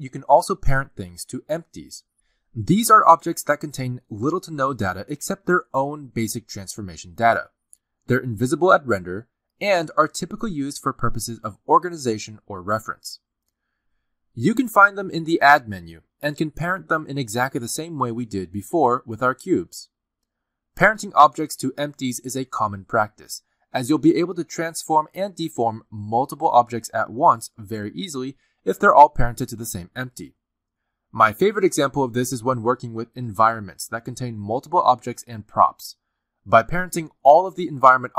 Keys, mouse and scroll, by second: 0.3 r, 0.8 r, 2.0 s, 2.5 r, 4.5-7.0 typing, 6.7 click, 7.8 click, 9.3 click, 9.8-10.8 scroll down 2, 10.8 click, 11.7 click, 12.2-13.1 scroll down 2, 15.1 click, 17.4 g, 18.6 click, 19.0 g, 19.9 shift+click, 20.7 ctrl+p, 21.6 click, 22.0 r, 24.3 click, 24.7 click, 25.3 r, 26.0 s, 29.0 g, 29.5 r, 31.4 r, 32.3 r, 33.4 middle click, 33.9 shift+middle click, 34.2 middle click, 34.6 s, 38.1 middle click.